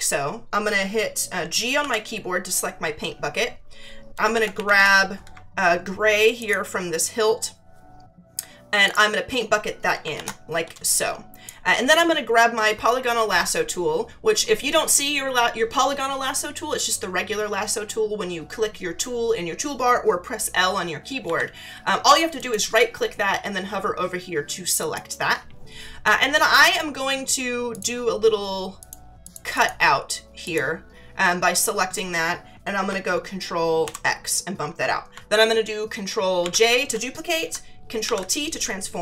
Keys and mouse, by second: 1.8 g, 4.3 ctrl+=, 4.5 ctrl+=, 6.4 alt+click, 8.8 click, 10.7 space, 10.9 click, 22.3 right click, 24.8 click, 27.7 click, 28.8 click, 33.8 ctrl+x, 36.4 ctrl+j, 38.0 ctrl+t.